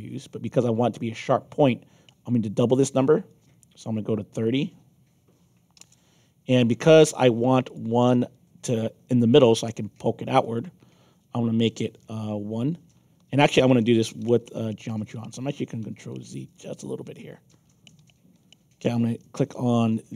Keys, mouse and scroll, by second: 3.2 click, 4.4 click, 7.6 click, 10.4 click, 13.1 ctrl+z, 14.2 ctrl+z, 15.4 ctrl+z, 15.8 ctrl+z, 16.5 click, 17.0 ctrl+z, 17.5 ctrl+z, 17.9 ctrl+z.